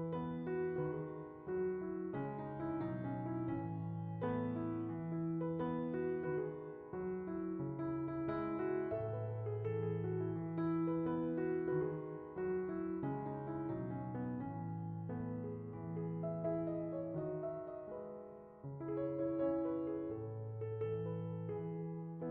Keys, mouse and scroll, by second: 2.1 click, 2.7 BackSpace, 4.3-5.6 scroll down 3, 5.6-7.3 middle drag, 7.3-8.2 drag, 11.3 click.